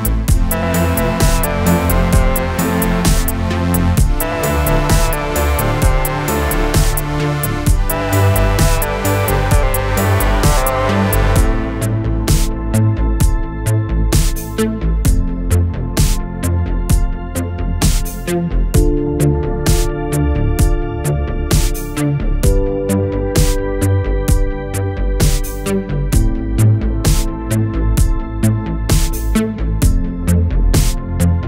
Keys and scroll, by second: 0.4 space, 1.1 space, 8.8 space, 11.3 Right, 12.1 Down, 12.8 Up, 19.9 alt+space, 29.3 shift+BackSpace, 29.8 BackSpace, 31.0 BackSpace.